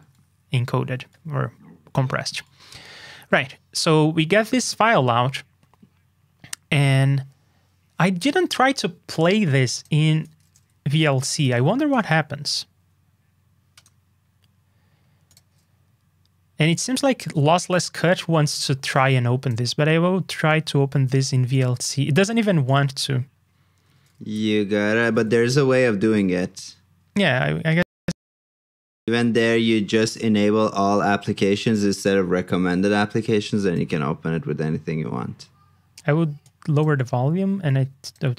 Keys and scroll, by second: 31.4 ctrl+alt+super+d.